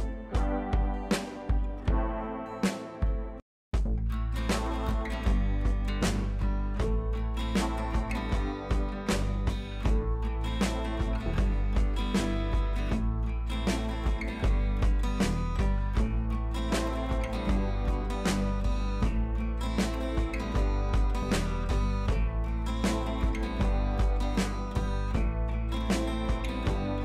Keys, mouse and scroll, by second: 3.2 scroll down 1, 4.7 click, 5.3 scroll down 1, 6.7 scroll up 1, 9.0 click, 12.3 scroll down 1, 14.4-14.8 scroll up 2, 14.6 ], 14.8 ], 15.0 click, 18.6 scroll up 1, 18.8-20.0 typing, 19.0 click, 20.1 click, 20.5 scroll down 1, 21.0 click, 21.2 scroll down 1, 23.2 scroll down 1, 24.2-25.6 drag, 25.6 ctrl+t.